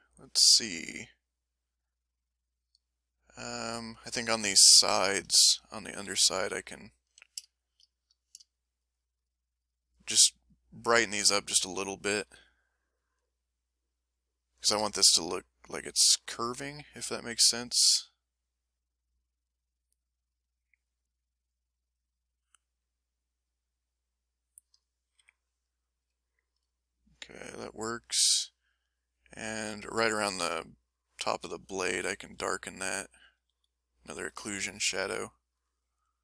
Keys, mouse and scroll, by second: 5.0 ctrl+click, 6.0 ctrl+m, 7.1 a, 8.5 shift+click, 9.6 shift+click, 10.4 shift+click, 10.9 shift+click, 12.2 s, 13.4-14.5 drag, 16.7 f, 17.1 click, 17.7 click, 18.3 click, 18.9 click, 19.5 click, 20.1 click, 20.6 click, 21.3 click, 21.7 click, 22.5-23.6 drag, 23.8 middle click, 25.1 m, 25.5-26.6 drag, 26.7-28.5 ctrl+drag, 28.6-30.0 middle drag, 31.4 ctrl+s, 31.7 middle click, 32.3 f, 32.9 ctrl+click, 33.4 f, 35.1 click.